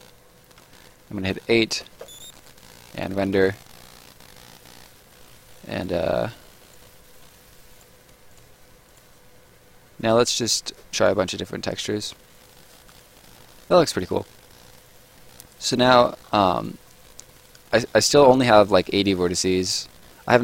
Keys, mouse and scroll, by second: 1.8 space, 2.3 right click, 6.1 right click, 7.7 click, 12.0 right click, 15.1 middle click, 15.6-16.0 scroll up 1, 16.0 middle click, 16.2 scroll up 1, 16.4 right click, 16.9 middle click, 17.3 scroll up 1, 17.5 right click.